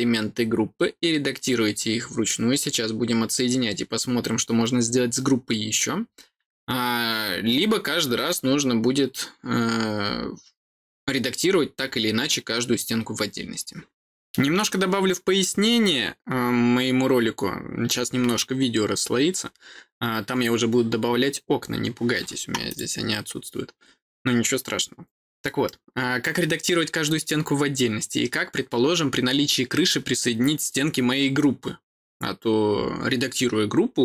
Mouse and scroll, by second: 22.6 click.